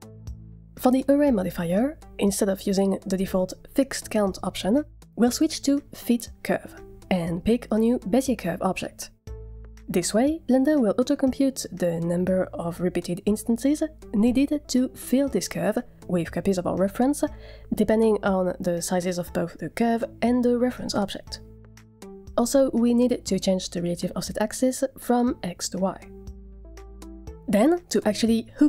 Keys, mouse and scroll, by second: 0.0 click, 1.8 click, 5.5 click, 6.4 click, 10.5-11.1 scroll down 2, 11.1-11.5 middle drag, 23.0-26.0 drag, 28.1 scroll up 2, 28.2-28.5 shift+middle drag.